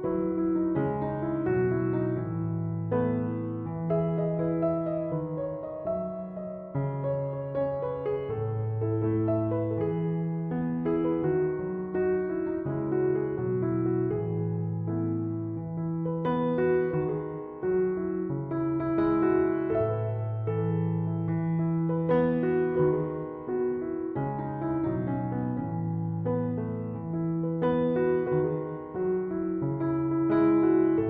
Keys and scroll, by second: 12.1-14.2 typing.